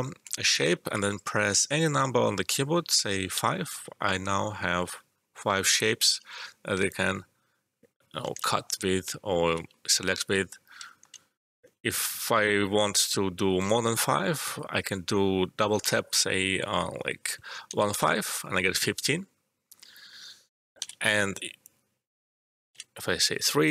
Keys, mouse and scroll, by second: 3.3 5, 6.8-10.2 alt+drag, 10.2 ctrl+z, 10.8 alt+middle click, 14.4-17.6 drag, 17.6 typing, 20.7 ctrl+z, 21.6 click, 22.7 3.